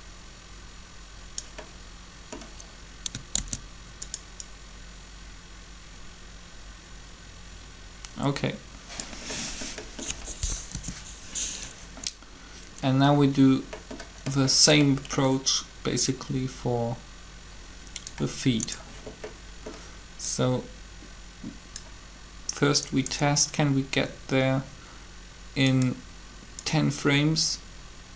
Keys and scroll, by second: 3.4 shift+d, 10.6 7.